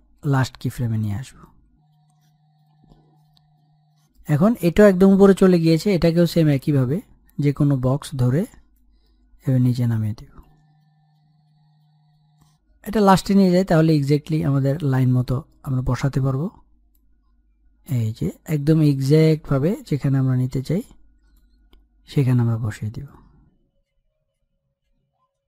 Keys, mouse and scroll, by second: 6.0 middle click, 6.7-7.2 scroll down 1, 7.2 middle click, 7.9-8.8 scroll up 1, 9.6-10.9 drag, 10.9 middle click, 11.9-16.8 drag, 16.8-17.4 scroll up 1, 17.4-18.8 middle drag, 18.8-25.4 drag.